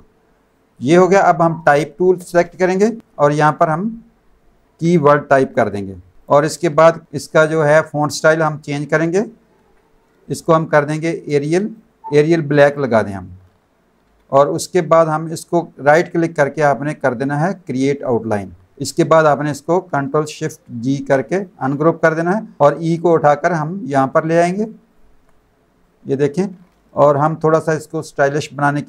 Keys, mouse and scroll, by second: 0.4 click, 1.7 space, 1.8 click, 3.3 click, 6.2 ctrl+click, 10.2 click, 11.1 click, 11.7 click, 12.6 click, 14.9 click, 15.8 right click, 17.6 click, 18.7 click, 20.8 ctrl+shift+g, 21.3 click, 22.6 ctrl+z, 25.3 click, 27.9 click.